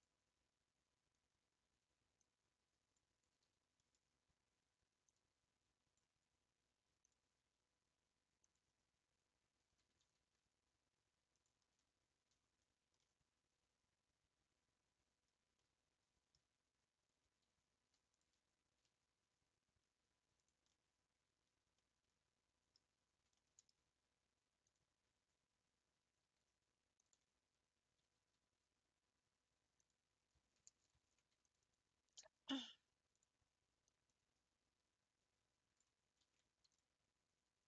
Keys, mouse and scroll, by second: 0.7 scroll up 2, 1.4-2.1 scroll up 2, 2.3 click, 3.6 g, 5.1 click, 7.1 click, 8.4 click, 9.8 g, 11.8-12.4 scroll down 4, 12.4 Tab, 12.8 scroll down 2, 13.0-16.4 middle drag, 16.4 Tab, 16.9-18.1 scroll up 2, 18.1 alt+click, 18.8 s, 20.7-23.9 middle drag, 23.9-24.6 scroll up 1, 24.6 click, 27.0 alt+click, 28.0 s, 28.1 s, 31.0 ctrl+r, 33.1 click, 34.1 click, 36.2 ctrl+v.